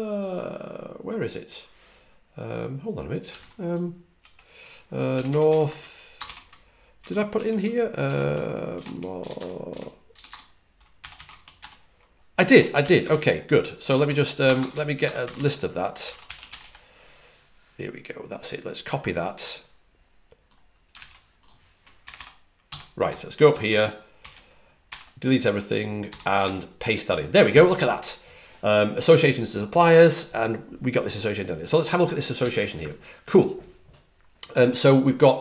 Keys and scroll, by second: 5.1-11.5 typing, 6.9 Tab, 7.2 Tab, 13.5-16.9 typing, 20.8 super+c, 22.3-24.6 typing.